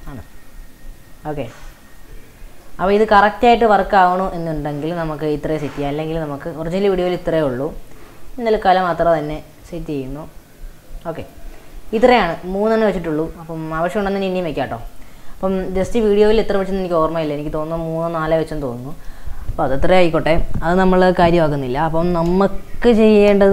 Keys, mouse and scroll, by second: 0.0 click, 0.3 shift+d, 2.7-3.4 shift+middle drag, 3.8 click, 4.7 g, 5.7-6.1 scroll down 5, 6.4-6.9 scroll up 4, 7.1 shift+click, 8.7 x, 11.0 x, 11.6-11.9 shift+middle drag, 11.9-12.3 drag, 12.3-14.8 middle drag, 14.8 click, 17.3-18.8 middle drag, 18.8-20.3 drag.